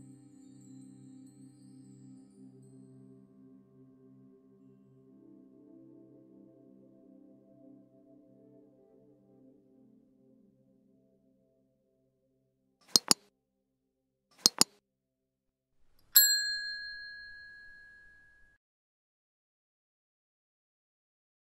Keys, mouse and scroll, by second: 0.4 Tab, 0.6 Tab, 1.3 Tab, 1.8 Tab, 2.0 scroll down 2, 2.5 middle click, 3.2 click, 3.6 Tab, 3.9 Tab, 6.6 middle click, 7.1-7.4 scroll up 2, 7.8 click, 8.5 Tab, 8.8 Tab, 9.6 click, 10.4 scroll down 4, 10.8-12.6 middle drag, 12.6 click.